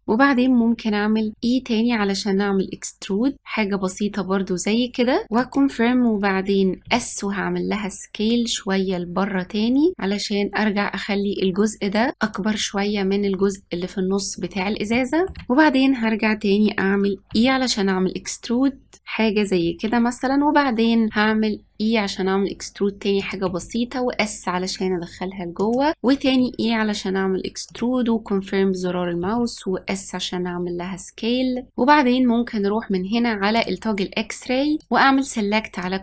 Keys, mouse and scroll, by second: 1.3 e, 6.8 s, 13.9-14.8 scroll down 2, 14.8-17.2 shift+middle drag, 17.2 e, 21.1 e, 23.4 s, 25.9 ctrl+z, 26.2 e, 29.1 s, 33.5-34.8 drag.